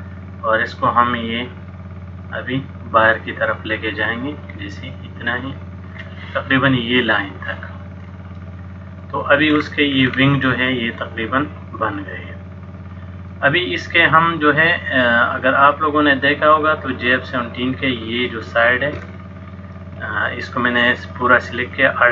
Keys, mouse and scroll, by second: 2.1 click, 8.2 middle click, 9.6-10.0 scroll up 3, 10.0 scroll down 1, 10.1-10.5 scroll down 5, 11.0 middle click, 14.0 middle click, 19.2 alt+click, 21.6 middle click.